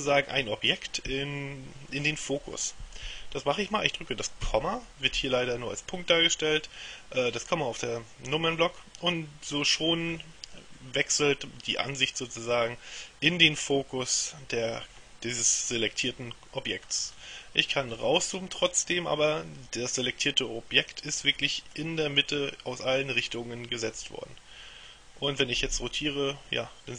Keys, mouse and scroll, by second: 4.5 KP_Decimal, 16.9-17.8 scroll down 2, 18.0-18.5 scroll down 1, 18.5-19.5 scroll up 1, 24.1-26.9 middle drag.